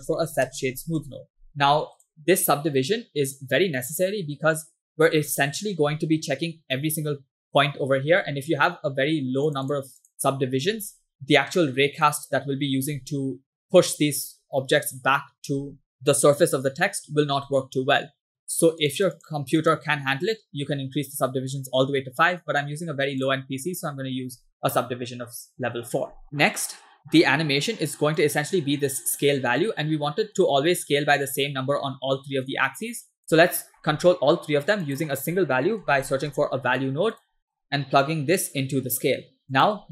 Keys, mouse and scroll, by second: 5.3-5.8 middle drag, 9.5 click, 9.8 click, 10.0 click, 11.1 scroll down 2, 12.1-12.9 middle drag, 18.0 scroll up 3, 18.9 click, 19.6 click, 23.3 drag, 25.2 scroll down 2, 26.1 scroll down 5, 26.2 middle click, 27.0 middle click, 27.1-28.0 scroll up 3, 28.2-33.4 shift+drag, 33.5 middle click, 33.9 shift+a, 38.1-39.2 drag, 39.4 scroll up 2, 39.6-39.9 drag.